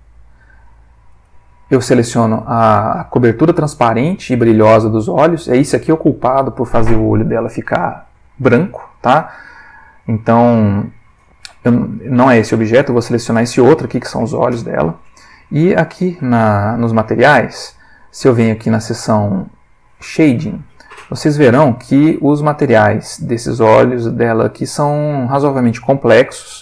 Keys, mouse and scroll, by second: 0.7 click, 1.2 g, 9.0 Escape, 12.5 click, 13.3 g, 14.6 Escape, 16.3 click, 17.2 middle click, 20.0 click, 21.8-22.4 middle drag, 24.5-25.0 middle drag.